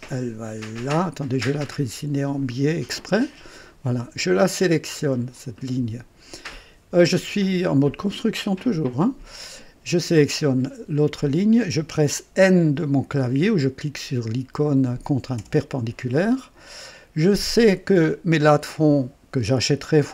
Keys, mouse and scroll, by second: 2.4 click, 3.3 right click, 5.3 click, 11.1 click, 15.3 n.